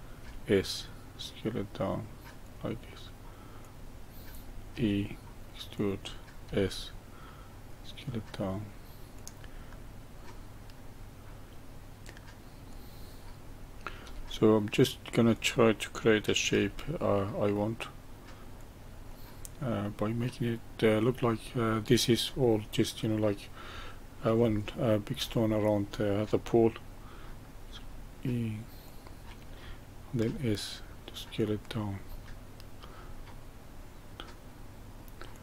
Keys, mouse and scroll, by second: 0.2 s, 3.6 click, 4.7 e, 6.4 s, 9.7-12.7 middle drag, 12.7 click, 14.0 e, 16.5 s, 19.0-20.3 middle drag, 20.3-20.8 scroll down 1, 20.8-21.6 middle drag, 21.6-22.3 scroll up 1, 22.3-25.6 middle drag, 25.6 click, 27.6 e, 30.1 s, 32.0-35.0 middle drag, 35.3 click.